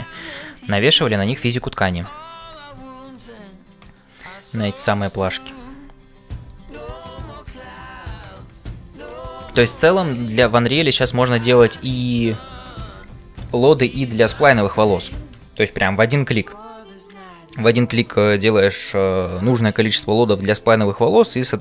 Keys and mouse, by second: 0.0-21.6 typing, 0.3 click, 2.7 shift+middle click, 3.9 middle click, 5.0 click, 8.2 click.